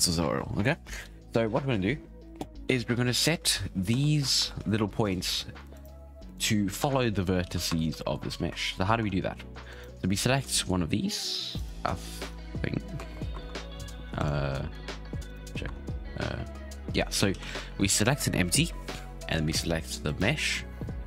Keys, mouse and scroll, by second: 1.9-3.0 scroll up 3, 3.0 right click, 3.9 Tab, 4.6 g, 5.7 right click, 6.3 right click, 6.8 Tab, 7.4 alt+a, 7.6 1, 7.9 shift+middle click, 8.1-8.5 scroll down 3, 8.5 shift+middle click, 8.7-9.0 scroll up 6, 9.0 Tab, 9.6 right click, 10.5-11.5 shift+middle drag, 11.5 right click, 12.2 right click, 12.8-13.3 scroll down 2, 13.3 shift+Left, 14.1 right click, 14.5-15.2 scroll up 2, 15.2 shift+right click, 15.6 Tab, 17.3 alt+a, 17.8 right click, 20.0 shift+right click.